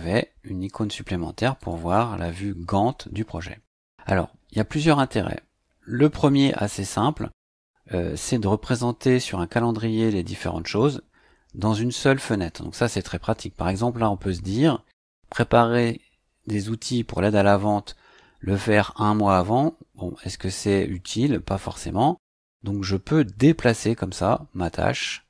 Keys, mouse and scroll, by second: 1.6 click, 22.4-25.2 drag.